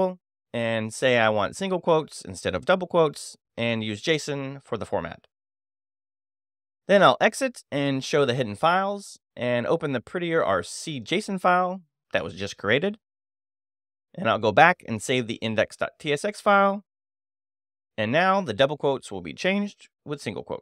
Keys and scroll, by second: 0.3 Down, 1.6 space, 2.0 Return, 3.2 y, 4.1 Return, 5.0 Return, 6.5 e, 6.7 x, 6.8 i, 7.0 t, 7.1 Return, 8.5 space, 8.6 e, 9.5 shift+h, 12.1 j, 13.1 Return, 13.7 space, 13.9 e, 16.7 [, 17.5 Escape, 18.0 shift+;, 18.1 shift+w, 18.6 Return.